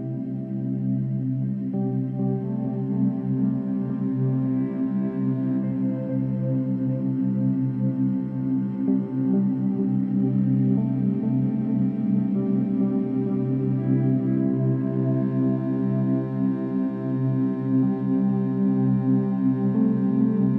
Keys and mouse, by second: 0.3 alt+click, 1.1 ctrl+alt+click, 1.6-5.5 alt+drag, 5.8 click, 8.8-10.2 alt+drag, 10.4-10.7 alt+shift+drag, 10.9-12.0 alt+drag, 13.7 click, 14.0 drag, 14.6 click, 15.1 shift+click, 15.8 shift+click, 16.6 shift+click, 17.0-17.5 drag, 18.1-19.0 drag.